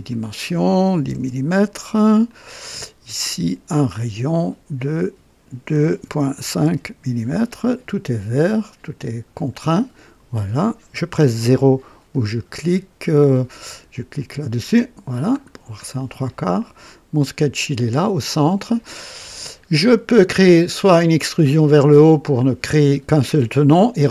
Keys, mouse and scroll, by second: 0.0 click, 0.9 KP_1, 1.1 KP_0, 2.2 click, 3.6 click, 4.7 click, 5.7 KP_2, 6.0 KP_Decimal, 6.3 KP_5, 6.6 KP_Enter, 9.3 click, 9.6-10.3 typing, 14.5 KP_0, 14.7 KP_0, 15.3-15.8 scroll down 2, 18.9-19.2 scroll down 1, 19.4-21.0 drag.